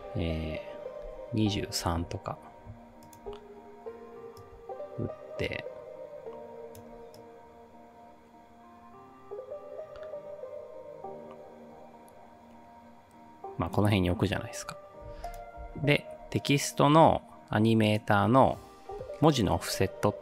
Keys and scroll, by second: 1.1 2, 1.4 3.